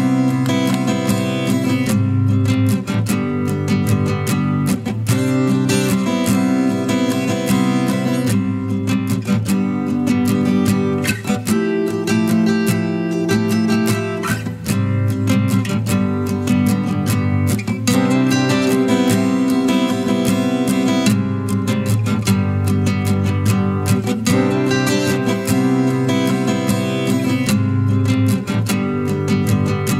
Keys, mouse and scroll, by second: 1.6 Return, 3.2 ctrl+=, 3.9 ctrl+=, 9.0-9.3 typing, 10.6 double click, 17.0 Up, 17.7 Up, 18.8-19.2 scroll down 1, 19.5 ctrl+click, 20.7 ctrl+e.